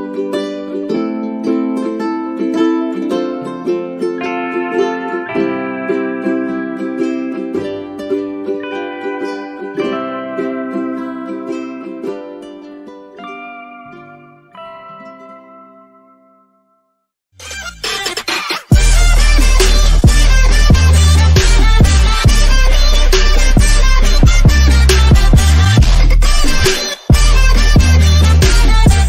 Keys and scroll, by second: 10.0 space.